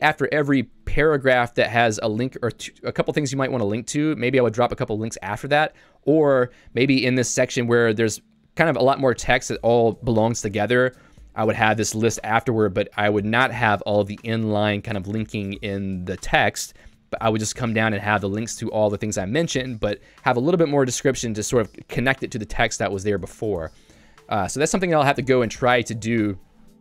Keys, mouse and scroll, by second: 1.5 j, 4.5-7.2 typing, 8.8 k, 11.4 j, 13.0 k, 14.8-16.0 l, 18.7 k, 19.2 j.